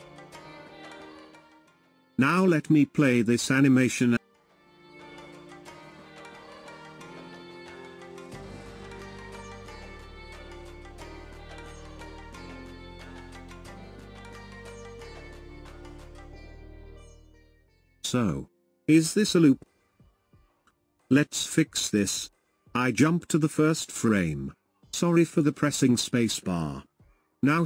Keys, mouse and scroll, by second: 1.1 scroll down 3, 2.3 space, 14.6-20.3 drag, 14.6-20.3 right drag, 20.3 space, 22.2-23.8 drag, 25.5 space, 27.5-27.6 drag.